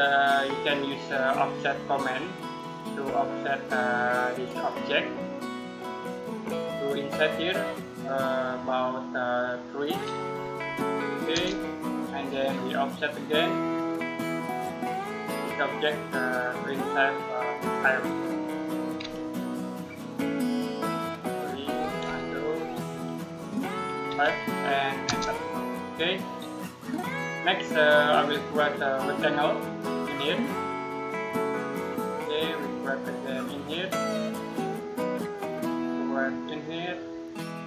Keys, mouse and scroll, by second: 1.3 click, 10.3 3, 11.2 Return, 13.6 click, 18.7 typing, 20.9 typing, 21.6 ctrl+Num_Lock, 21.9 ctrl+z, 24.9 Return, 25.8-26.7 scroll down 1, 29.1 click.